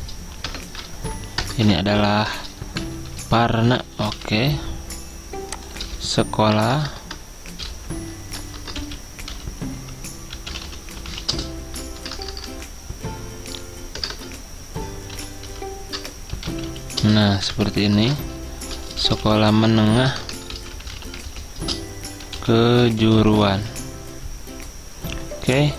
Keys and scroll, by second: 0.5 Return, 0.5 \, 1.5 BackSpace, 2.1 ctrl+Right, 3.5-4.3 typing, 5.5-9.8 typing, 10.9-12.6 typing, 13.9-21.1 typing, 22.5-24.1 typing, 25.5-25.7 typing.